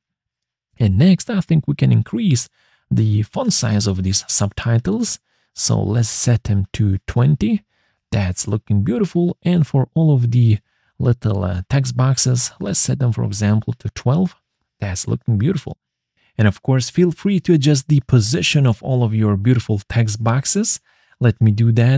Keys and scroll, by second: 5.0 ctrl+z, 7.8 0, 8.0 Return, 13.0-13.8 typing, 20.3-21.9 typing.